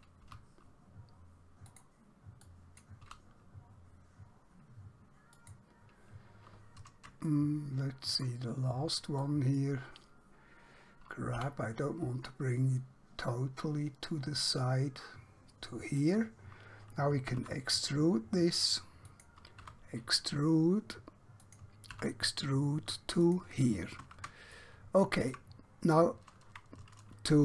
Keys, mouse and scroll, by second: 0.3 g, 1.8 click, 3.1 g, 5.4 click, 7.4 shift+middle click, 9.3 click, 11.4 g, 16.0 click, 17.4 e, 19.1 click, 19.7 e, 21.5 click, 22.0 e, 23.3 click, 24.6 middle click, 25.8-26.2 scroll down 1.